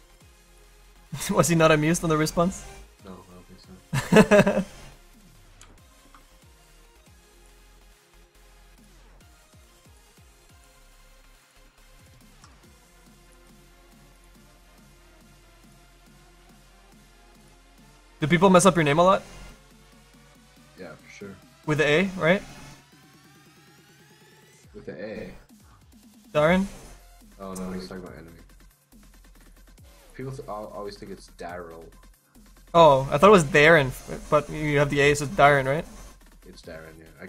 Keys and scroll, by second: 24.9 Caps_Lock.